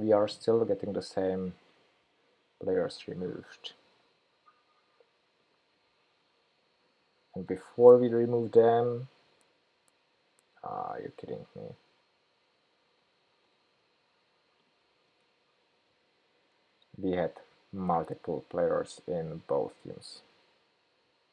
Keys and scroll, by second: 6.3 super+', 6.4 super+'.